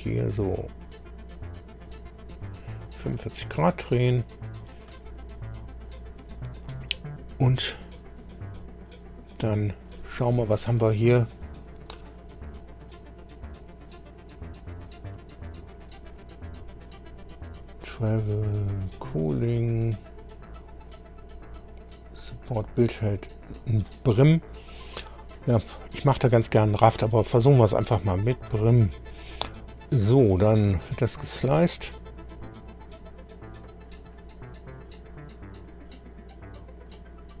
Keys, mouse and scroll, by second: 4.9-8.0 right drag, 13.6-14.1 scroll down 1, 15.0 scroll down 1, 16.1-16.5 scroll down 2, 16.9-17.3 scroll down 2, 17.9 scroll down 2, 18.5 scroll down 2, 28.5-29.9 right drag, 30.6 click.